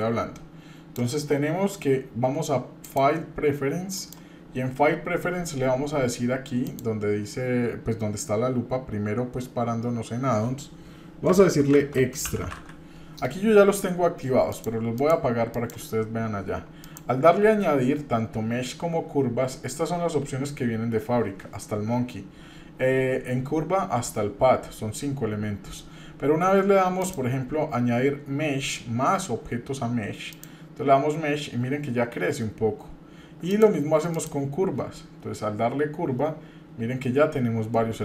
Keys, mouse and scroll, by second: 2.8-4.2 drag, 16.9-25.9 drag, 30.3-38.0 drag.